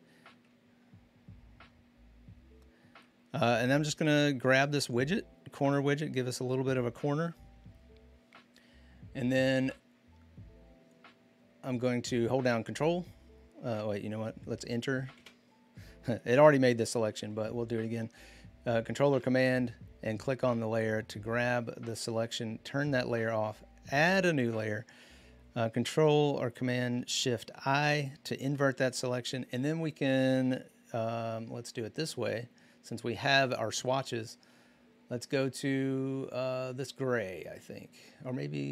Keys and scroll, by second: 15.0 Return, 17.0 ctrl+d, 27.5 ctrl+shift+i.